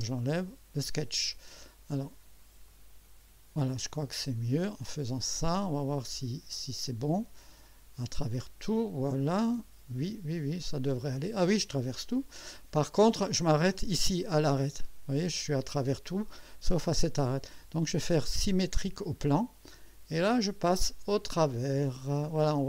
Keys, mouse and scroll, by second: 0.4 click, 2.7 click, 4.0-6.4 drag, 7.5 click, 8.1 click, 9.2-13.7 drag, 14.4-17.2 drag, 18.3 click, 19.4-22.6 drag.